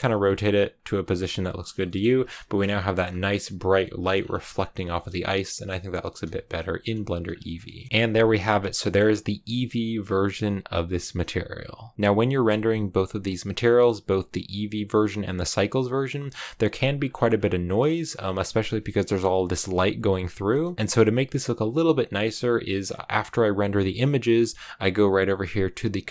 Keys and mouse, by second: 0.0-1.0 typing, 0.6 click, 1.5 click, 1.7 shift+middle click, 2.2 a, 2.6 shift+middle click, 3.6 shift+middle click, 3.8 shift+click, 4.8 shift+middle click, 5.9 click, 6.1 r, 6.2 r, 6.4 click, 6.5 g, 6.7 click, 6.9 s, 7.2 click, 7.5 click, 7.9 click, 8.7 click, 11.8 click, 17.6 shift+middle click, 20.6 shift+click.